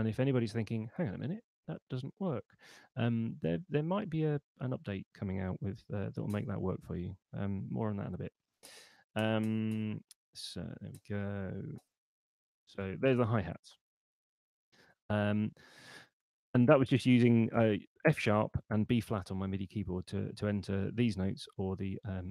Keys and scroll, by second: 5.5 6, 8.3 5, 10.7 6, 11.5 5, 14.9 Escape.